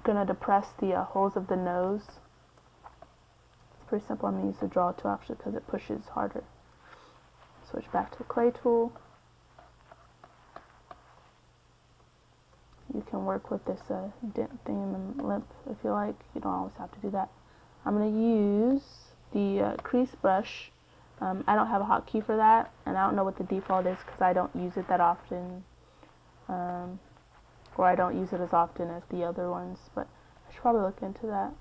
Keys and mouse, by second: 2.4-5.6 drag, 4.4 x, 7.8-8.8 middle drag, 8.6 c, 13.4 middle click, 14.0 middle click, 17.8-20.8 middle drag, 22.6 middle click, 27.8 middle click, 28.7-31.0 drag, 31.1 middle click.